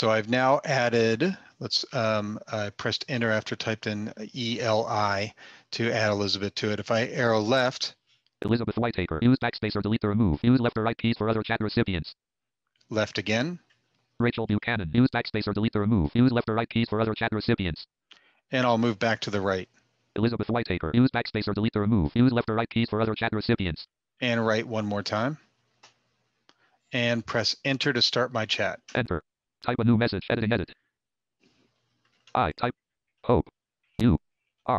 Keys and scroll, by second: 26.8 Return, 29.1 Return.